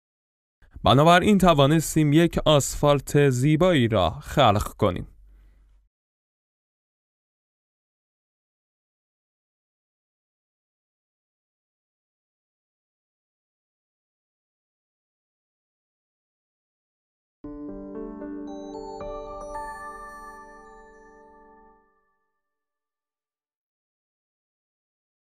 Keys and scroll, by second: 9.4 F11.